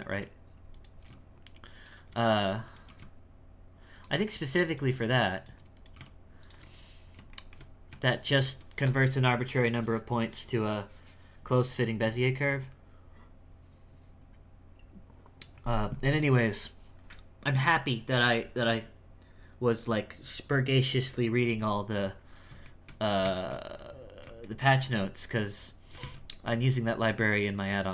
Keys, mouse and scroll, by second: 0.7 right click, 1.0 g, 2.6 right click, 2.9 g, 4.6 right click, 4.8 g, 5.7 right click, 5.9 g, 6.7-7.3 scroll down 7, 7.3 shift+middle click, 7.7-8.0 scroll down 2, 8.0 shift+middle click, 8.4 a, 22.2-22.6 scroll up 2, 22.6 shift+middle click, 23.1 scroll up 3, 23.3 shift+middle click, 23.6-24.4 scroll down 5, 24.4-25.5 shift+middle drag, 25.5 right click, 26.0 shift+s, 26.3 shift+middle click, 26.6-27.4 scroll up 7, 27.4 right click.